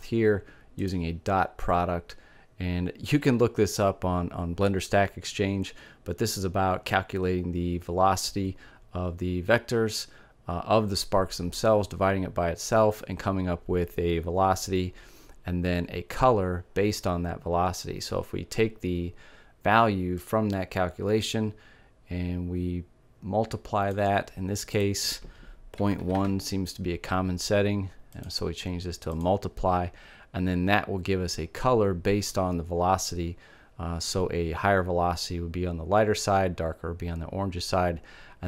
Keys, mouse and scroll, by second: 0.2 click, 19.6-21.3 drag, 24.2-25.7 drag, 27.6-29.3 drag.